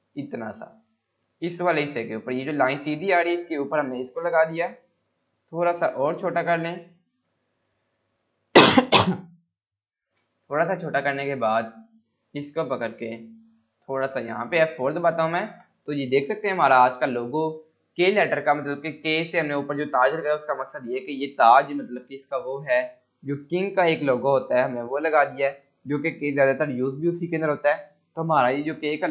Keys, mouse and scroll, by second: 0.5 scroll up 1, 1.3-1.9 drag, 3.2 scroll, 3.2 scroll up 1, 4.0 scroll down 1, 4.2 scroll up 1, 5.9-7.1 shift+click, 10.0 Num_Lock, 10.0 scroll down 1, 11.6-12.5 click, 14.1 scroll up 1, 14.8 F4.